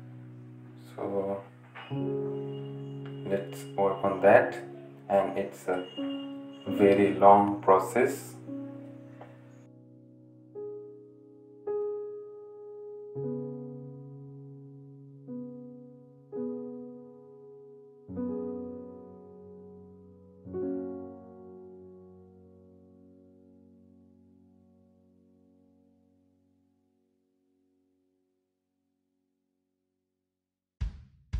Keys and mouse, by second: 1.0 typing, 1.1-3.3 drag, 3.3 ctrl+z, 3.4-6.4 drag, 6.5-9.0 drag, 9.0-10.0 drag, 10.1 right click, 10.2-13.7 drag, 13.8 right click, 13.9-31.3 drag.